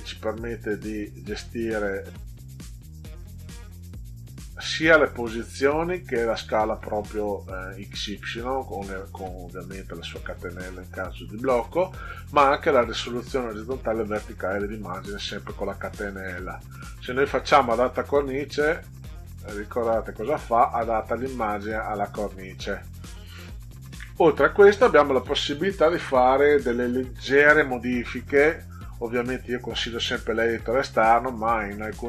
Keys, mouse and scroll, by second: 19.1 click, 23.9 ctrl+z, 25.1 click, 28.3-29.7 drag.